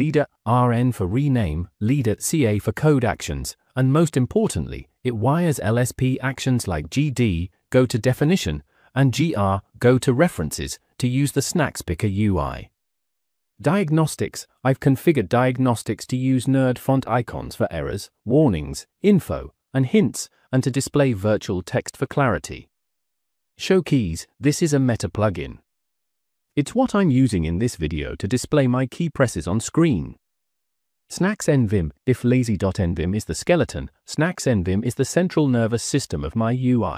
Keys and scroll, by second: 0.0-0.6 typing, 1.7-5.5 typing, 11.1-12.5 typing, 12.7 Return, 16.7-19.2 typing, 23.4 -, 24.0 Return, 24.0 j, 26.7-28.6 typing, 30.6 -, 30.9 j, 31.2 Return, 32.1 j, 32.2 j, 32.4 j, 34.8-36.9 typing.